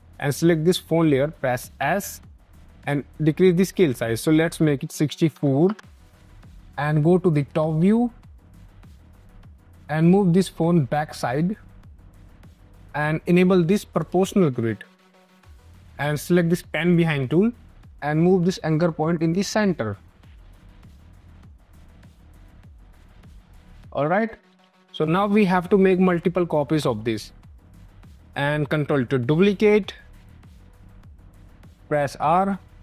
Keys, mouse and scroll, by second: 1.7 s, 2.7 click, 3.9 click, 4.9 KP_6, 5.3 KP_4, 5.5 Return, 7.2 click, 9.6 ctrl+z, 10.6 click, 12.2 space, 12.3 click, 13.8 click, 15.2 click, 23.0 scroll, 23.4 click, 25.9 scroll, 26.6 space, 26.7 click, 27.4 click, 27.8 r, 29.3 ctrl+d, 31.3 click, 31.7 r.